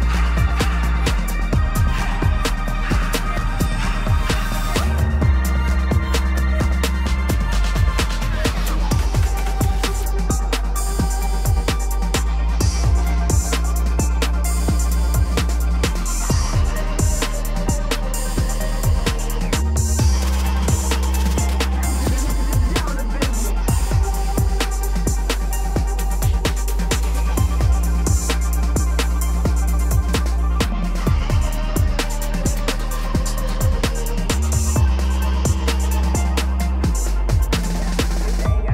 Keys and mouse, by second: 1.7-3.9 drag, 3.7 l, 5.1-6.5 drag, 6.1 l, 7.5-8.0 middle drag, 8.2 shift+middle drag, 10.4 Tab, 11.4 a, 12.2 s, 12.3 x, 17.2 shift+click, 17.7-19.5 middle drag, 20.2 click, 21.1 click, 22.7-24.0 drag, 24.1 ctrl+z, 24.7-26.7 drag, 27.4-30.0 middle drag, 30.4 shift+middle click, 31.9 s, 31.9 x, 34.0 click, 34.6-35.7 middle drag, 35.9 shift+middle click, 37.1-38.7 drag.